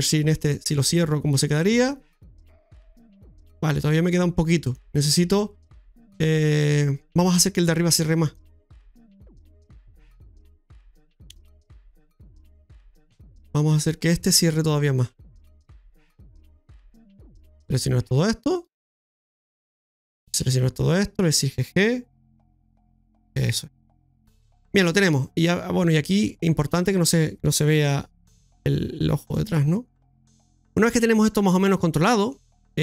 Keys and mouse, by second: 0.4 click, 1.5 click, 2.4-4.1 drag, 4.7 click, 8.2 click, 9.2 right click, 10.3 right click, 11.3 right click, 11.6 Tab, 12.1 middle click, 15.0 middle click, 17.1 right click, 17.6 shift+right click, 18.0 shift+right click, 19.2 shift+right click, 19.8 shift+right click, 20.3 shift+right click, 20.7 shift+right click, 21.2 shift+right click, 23.7 middle click, 25.0 middle click, 25.9 right click, 26.2 middle click, 29.5 middle click, 31.5 middle click.